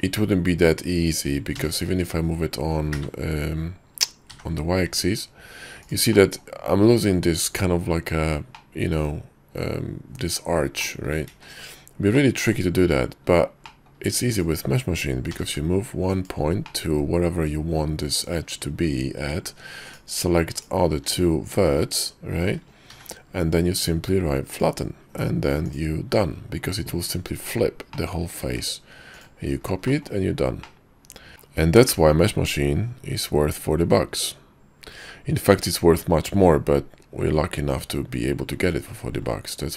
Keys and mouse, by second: 1.7 g, 6.3 middle click, 8.7-9.9 middle drag, 10.9 middle click, 11.4 ctrl+z, 12.3 click, 13.8 click, 14.4 click, 15.4 g, 16.9 click, 17.1-19.5 middle drag, 20.0 shift+click, 20.6 shift+click, 23.0 y, 25.8-26.3 middle drag, 26.1 Tab, 28.0 click, 28.5 alt+x, 29.2 click, 30.0 drag, 30.7-31.3 drag, 31.3 ctrl+z, 31.6-39.4 middle drag.